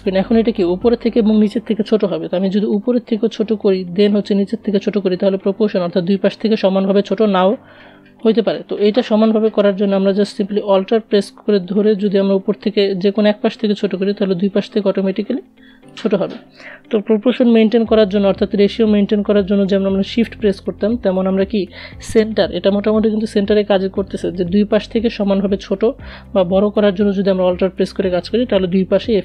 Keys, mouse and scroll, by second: 5.2-8.1 drag, 8.1 ctrl+z, 10.5-18.6 alt+drag.